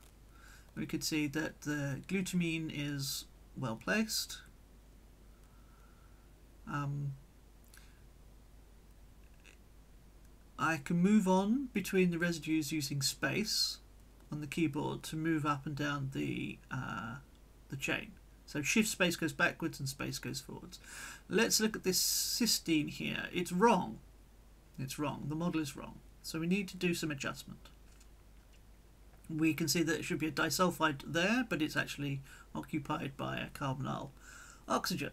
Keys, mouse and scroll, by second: 0.5 click, 2.4 click, 7.7 p, 9.2 space, 10.6-13.7 drag, 13.7 space, 14.9-16.4 drag, 16.7 shift+space, 18.8 shift+space, 19.8 space, 20.9-22.1 drag, 22.1-24.3 middle drag, 24.3 click, 25.1 click, 26.0-28.8 middle drag, 28.8-29.5 scroll up 2, 29.1 click, 30.3-31.3 drag, 32.5-35.1 drag.